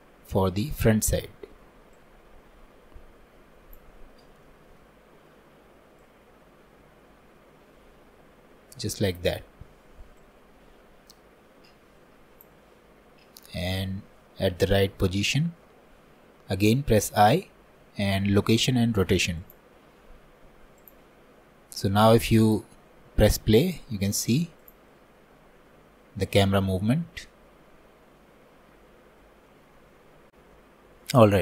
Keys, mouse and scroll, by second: 0.8 click, 4.5-31.4 shift+middle drag.